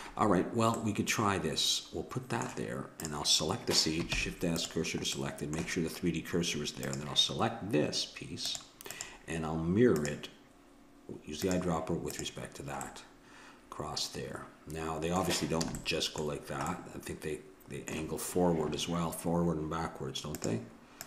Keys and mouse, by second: 0.8-3.1 middle drag, 3.1-4.6 drag, 4.1 shift+s, 6.9-10.8 drag, 11.4-13.3 drag, 12.9-14.6 middle drag, 15.7 a, 15.8-18.9 middle drag.